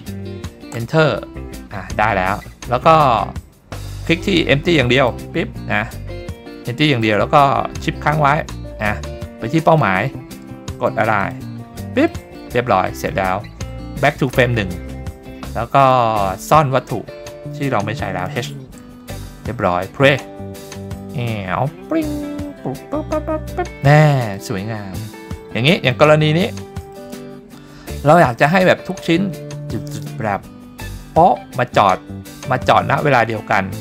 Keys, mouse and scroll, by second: 2.3-3.3 scroll down 2, 3.3-4.9 scroll up 2, 4.9 scroll up 1, 5.0 click, 6.4-7.1 middle drag, 9.7 shift+click, 11.2 click, 12.1 middle drag, 12.9 middle click, 14.3 click, 15.8 click, 16.4 click, 18.2 h, 18.7-19.9 scroll down 3, 20.1 click, 24.4 click, 24.7-25.6 scroll up 4, 25.6-25.9 middle drag, 26.2 scroll up 1, 26.5-27.1 shift+middle drag, 28.4-31.4 drag.